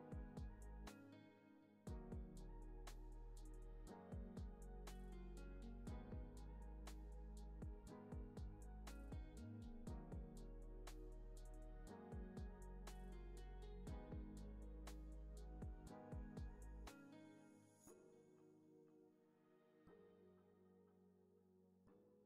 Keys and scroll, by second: 13.3 x.